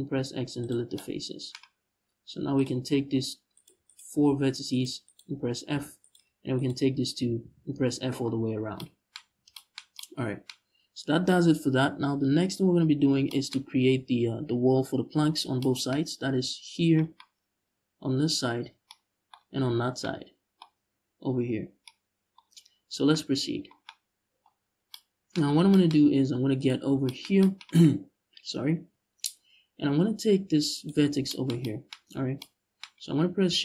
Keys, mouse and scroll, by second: 2.2 click, 3.2-4.8 right drag, 5.4 f, 5.7 right click, 6.2-6.9 shift+right drag, 6.9 f, 7.7 Tab, 8.1-8.4 scroll down 1, 8.8 a, 15.0-15.3 scroll down 1, 16.8-23.7 middle drag, 18.1 scroll up 2, 18.2-18.6 scroll down 2, 19.0-19.7 scroll up 2, 21.3 scroll down 2, 22.5-22.8 scroll up 2, 24.3 scroll down 1, 25.0-25.4 scroll up 1, 25.6-26.2 scroll up 1, 26.3-26.7 right drag, 28.5 Tab, 30.4 right click, 31.8 scroll up 1.